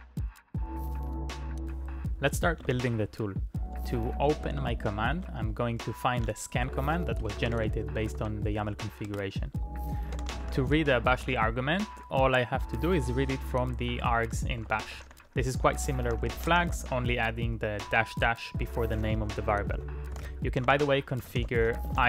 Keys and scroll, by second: 1.6-3.3 typing, 5.1 Up, 5.1 Return, 6.6-13.3 typing, 14.3-22.0 typing.